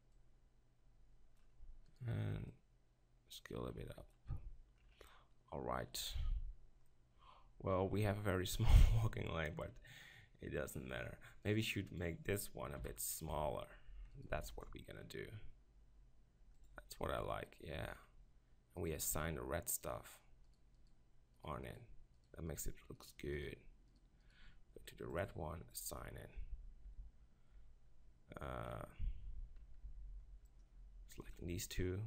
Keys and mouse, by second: 2.0-4.1 middle drag, 5.1-6.9 middle drag, 8.0-9.0 middle drag, 9.1-11.4 middle drag, 11.5 right click, 12.8 KP_7, 13.4 Tab, 14.5 ctrl+r, 23.1-25.2 right drag, 25.2-26.2 middle drag, 26.2 click, 26.9 Tab, 27.6 Tab, 29.9 b.